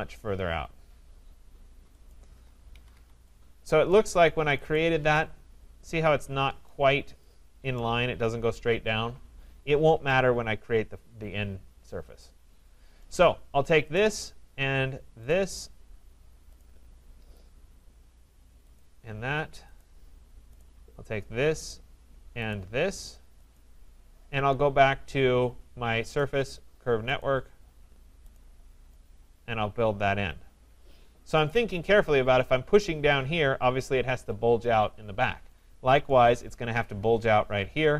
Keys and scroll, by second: 2.7 Escape.